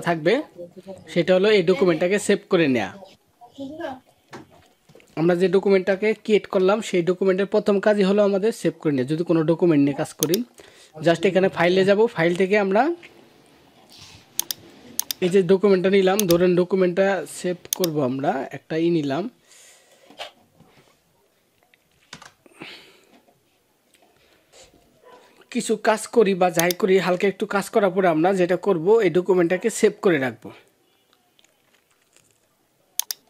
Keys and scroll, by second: 5.8 ctrl+-, 21.9 alt+BackSpace.